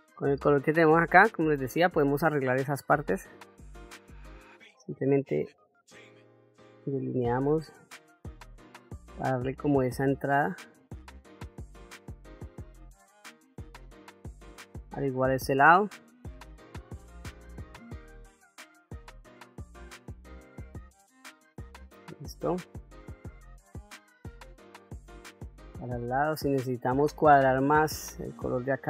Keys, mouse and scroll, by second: 0.7 click, 2.6-4.0 drag, 4.9-6.3 drag, 7.0 click, 9.0-10.3 drag, 10.9 click, 11.1 click, 11.2 click, 11.4 click, 11.6 click, 11.7 ctrl+middle click, 11.9 shift+middle click, 12.2 click, 12.4 click, 12.7 click, 12.9 click, 13.2 click, 13.3 middle click, 13.5 click, 13.7 click, 14.1 shift+middle click, 15.8 middle click, 16.3 click, 16.6 ctrl+z, 16.7 click, 16.9 click, 17.2 click, 17.4 click, 17.7 shift+middle click, 17.9 click, 18.2 click, 18.6 click, 19.0 ctrl+z, 19.0 middle click, 19.1 click, 19.7 shift+middle click, 20.2 click, 20.9 click, 21.4 middle click, 21.6 ctrl+middle click, 22.1 middle click, 24.1 ctrl+middle click, 25.2 middle click, 27.2 click, 27.9 middle click.